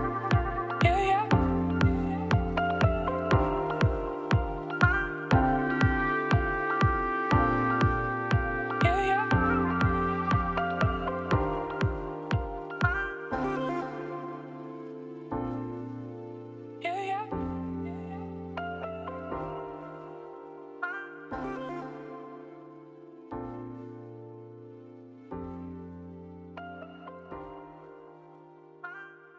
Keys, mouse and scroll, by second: 8.2 scroll up 1, 8.5 scroll down 2, 8.6 middle click, 9.1-9.7 scroll up 2, 9.7-10.2 scroll down 1, 10.2-11.3 shift+drag, 12.5-13.1 scroll down 3, 13.1-13.5 scroll up 3, 13.5-14.0 scroll down 2, 14.0 KP_1, 14.6 shift+middle click, 15.2 scroll down 4, 15.4 middle click, 16.2-16.5 scroll up 2, 16.5 KP_3, 16.7-17.1 scroll up 10, 17.4 Tab, 17.7-18.6 scroll down 2, 18.6 z, 19.0 click, 19.3 click, 19.5 scroll up 1, 19.7-22.1 shift+middle drag, 22.1 ctrl+a, 22.5 Tab, 22.9-23.5 scroll down 4, 23.5 ctrl+r, 26.7 alt+click, 27.0 s, 28.5 2.